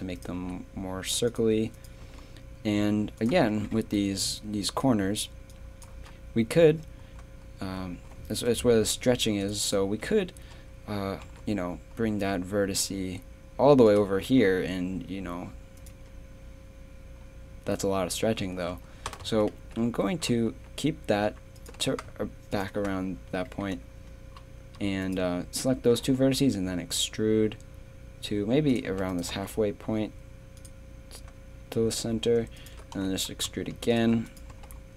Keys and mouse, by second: 0.4 g, 2.0 g, 3.9 d, 4.4-5.5 drag, 11.2 g, 14.2 z, 14.6 a, 19.3 ctrl+z, 19.5 ctrl+z, 19.8 ctrl+z, 20.5 a, 21.7 g, 25.0 click, 26.0 e, 28.9 z, 29.3 g, 32.6-34.5 drag, 32.9 e, 34.5 g.